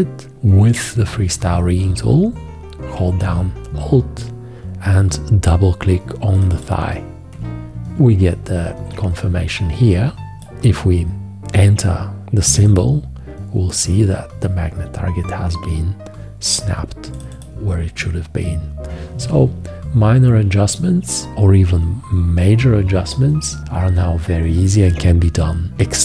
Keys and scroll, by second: 0.5 F4, 25.7 1.